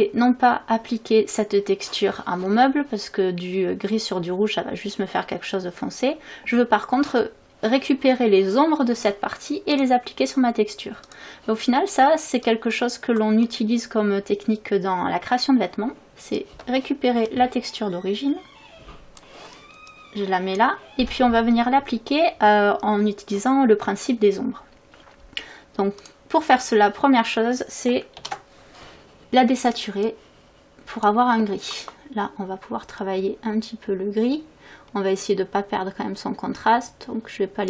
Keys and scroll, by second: 28.2 ctrl+u.